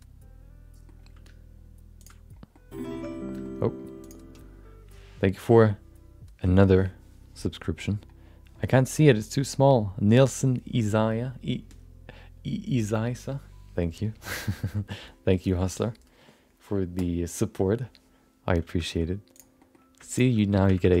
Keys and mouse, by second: 1.0 g, 2.5 middle click, 2.9 shift+middle click, 3.1 middle click, 4.0 click, 18.8 middle click, 19.3 click, 19.6 middle click, 20.1 shift+click, 20.4 middle click, 20.6 g.